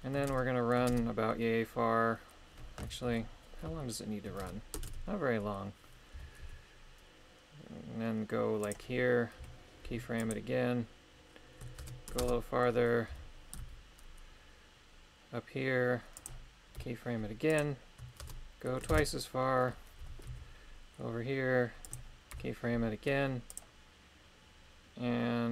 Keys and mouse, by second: 0.3 shift+space, 0.9 shift+space, 3.1 shift+Left, 4.4 shift+space, 4.8 shift+space, 6.1 g, 6.4 y, 8.6 click, 9.4 i, 11.8 shift+space, 12.2 shift+space, 13.1 g, 13.5 z, 16.1 click, 16.7 i, 18.2 shift+space, 18.9 shift+space, 20.0 g, 20.3 y, 21.8 click, 22.3 i.